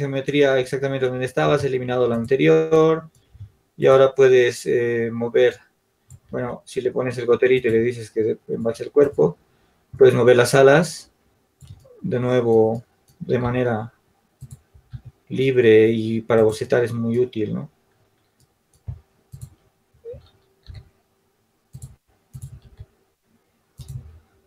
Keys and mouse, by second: 2.6 Tab, 5.7 Tab, 8.2 ctrl+z, 8.2-17.5 drag, 17.5 g, 21.5 s.